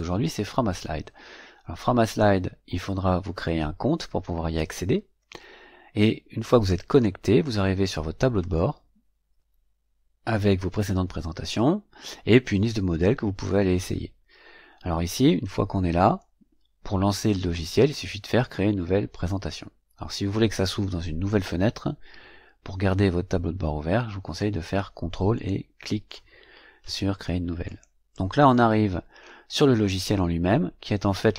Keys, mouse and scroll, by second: 2.0 click, 6.8 click, 25.3 ctrl+click, 27.6 click.